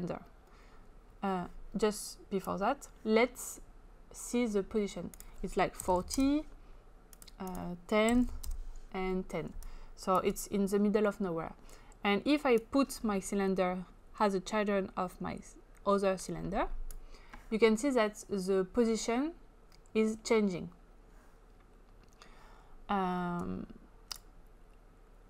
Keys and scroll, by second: 5.5-6.4 typing, 7.9-8.6 typing.